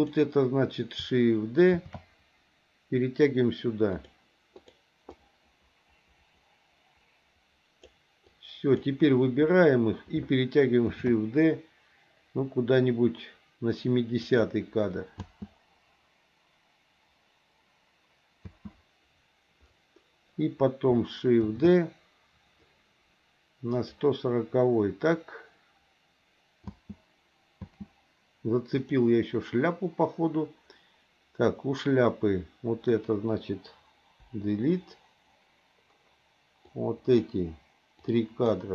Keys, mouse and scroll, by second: 1.8 shift+d, 4.6 click, 5.1-7.9 drag, 8.2 click, 10.9 shift+d, 15.2 space, 18.4 space, 21.4 shift+d, 26.7 space, 28.8 click, 28.8 space, 34.2 Delete, 36.6 click, 38.1 click.